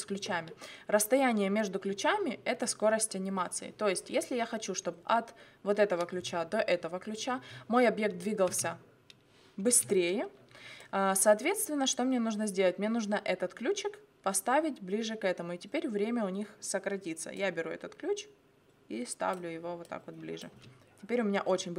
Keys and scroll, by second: 8.5 space, 20.5 space.